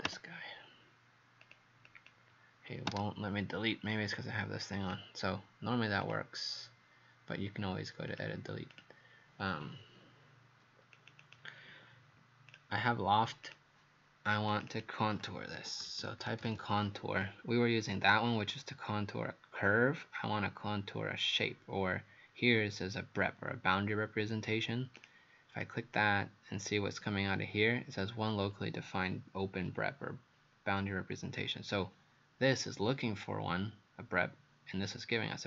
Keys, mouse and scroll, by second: 0.1 Delete, 1.4 click, 1.9 click, 2.9 Delete, 4.8 click, 8.7 click, 11.0 click, 11.2 click, 12.5 click, 14.7 click, 15.4-17.1 typing, 25.0 click, 25.6 click.